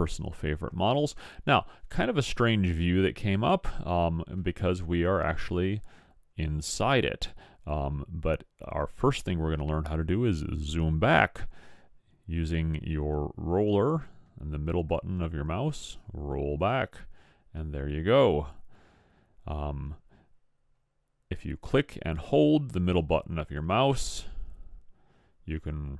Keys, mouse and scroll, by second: 12.0-15.4 middle drag, 22.5-24.4 middle drag.